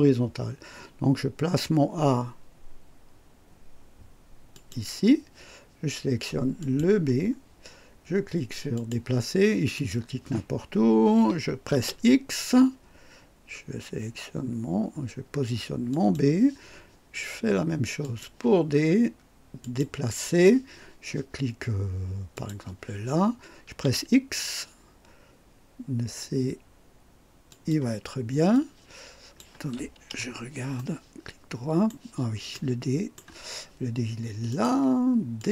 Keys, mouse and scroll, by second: 4.5 click, 6.6 click, 8.7 click, 9.7 click, 11.7 x, 15.9 click, 18.0 click, 19.6 click, 22.3 click, 23.7 x, 27.5 click, 28.5-29.6 drag, 30.0 KP_2, 30.8-32.1 right drag, 32.5-33.3 right drag, 34.5 click, 35.4 click.